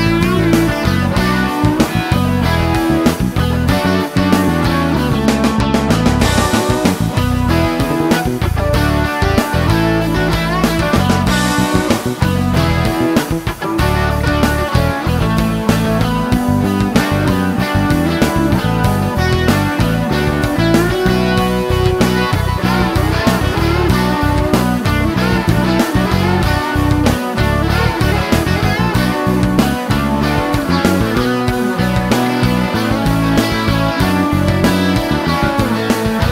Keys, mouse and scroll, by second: 2.1 click, 2.5 right click, 5.0 click, 7.1 click, 9.5 shift+h, 12.3-13.7 typing, 16.9 click, 18.3 click, 20.2 click, 21.7 s, 24.2 click, 25.1 click, 26.1 click, 29.4 e, 30.5-31.0 scroll up 2, 33.7 click, 35.0 click.